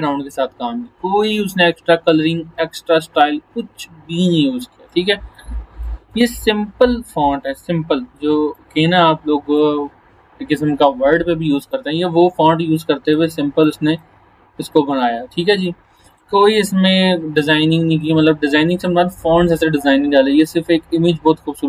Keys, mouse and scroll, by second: 4.9-5.5 click, 5.9-15.9 drag.